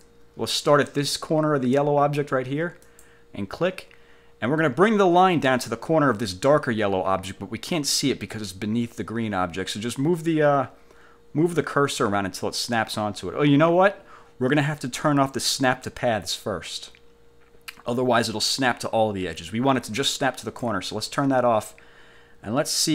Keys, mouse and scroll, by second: 3.0 click, 20.6 click.